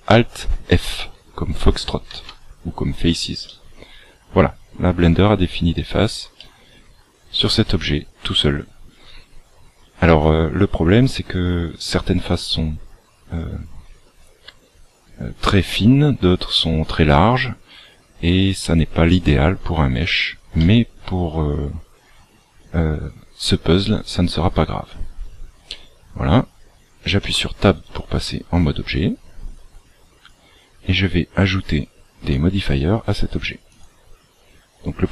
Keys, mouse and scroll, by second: 2.0 alt+f, 3.4 middle click, 6.3 middle click, 18.6 middle click, 20.5 middle click, 22.4-23.2 scroll up 1, 27.2 Tab, 29.5 click, 31.5 click, 33.6 click, 34.7 click.